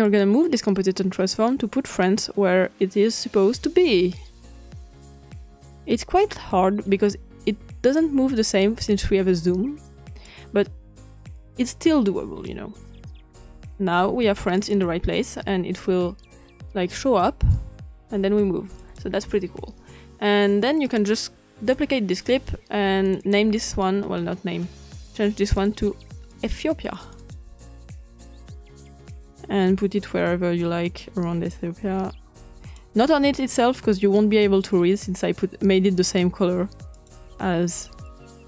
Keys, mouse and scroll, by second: 11.3 click, 14.5 click, 18.7 click, 20.8 right click, 21.6 click, 23.0 click, 25.5 click, 26.3 click, 26.8 click, 27.5 click, 27.9-29.1 typing, 28.9 click, 29.2-31.5 drag, 32.5 click, 36.9 click.